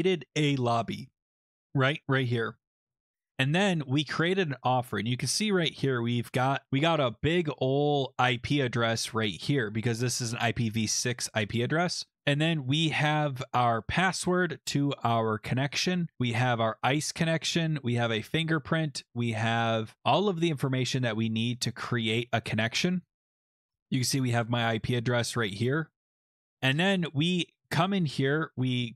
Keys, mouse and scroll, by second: 2.8 click, 2.9-5.1 scroll, 7.2 click, 10.2-12.1 drag, 15.7 click, 17.0 click, 17.4 click, 18.3 click, 19.5 click, 23.0 click, 23.2 click, 25.9 click.